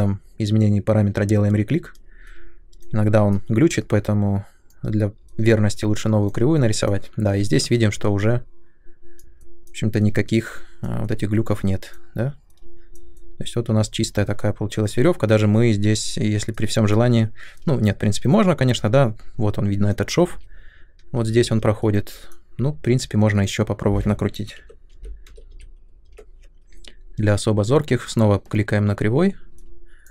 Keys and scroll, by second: 20.2 shift+f, 24.3-25.9 typing, 26.0 Return.